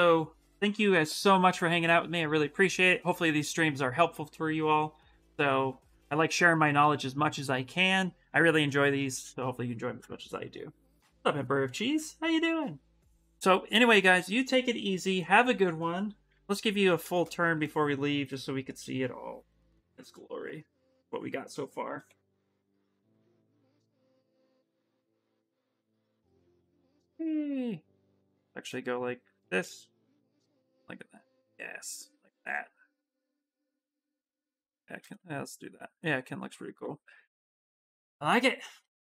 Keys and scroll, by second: 21.6 shift+s, 25.1 shift+s, 29.7 shift+s.